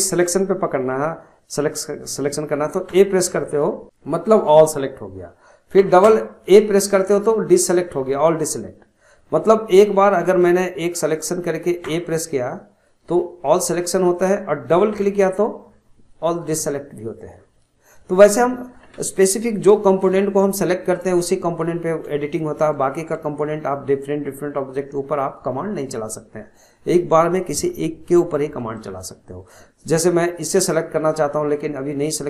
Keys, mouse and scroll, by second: 2.9 a, 3.6 scroll down 1, 5.8 a, 6.1 a, 7.2 scroll up 3, 11.1 click, 11.8 a, 14.7 a, 14.9 a, 17.3 scroll down 4, 17.6-18.7 scroll up 1, 18.7-19.2 scroll down 1, 19.2-20.4 shift+middle drag, 20.4 scroll up 1, 20.8-25.3 middle drag, 28.7-30.6 shift+middle drag, 30.6 click.